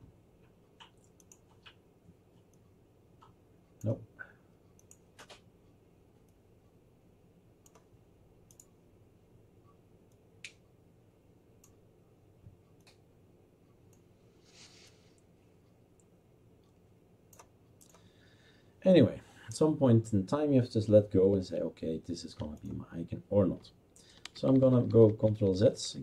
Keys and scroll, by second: 24.2 ctrl+z, 24.4 ctrl+z, 24.6 ctrl+z, 24.8 ctrl+z, 25.0 ctrl+z, 25.2 ctrl+z, 25.3 ctrl+z, 25.5 ctrl+z, 25.7 ctrl+z, 25.9 ctrl+z.